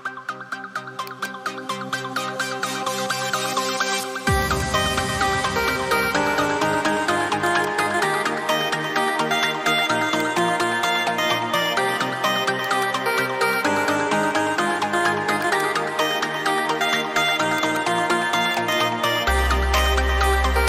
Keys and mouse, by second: 1.0 click, 2.7 right click, 4.4 click, 10.2 click.